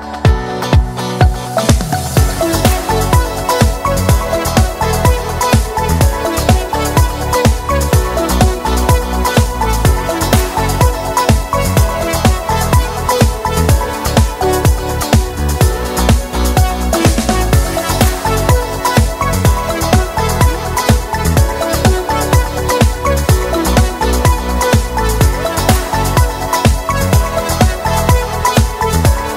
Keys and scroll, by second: 2.8 space, 20.2 s.